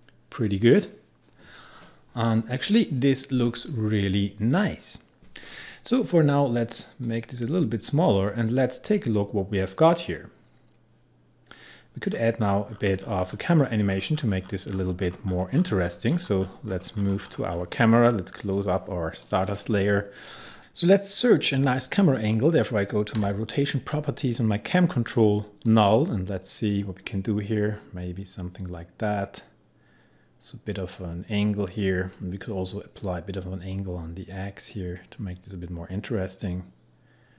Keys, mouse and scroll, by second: 7.1-9.4 drag, 9.4-10.1 scroll up 1, 11.9 scroll down 1, 12.1-13.1 scroll up 1, 18.4 click, 21.6 s, 23.2 r, 25.7-37.3 drag.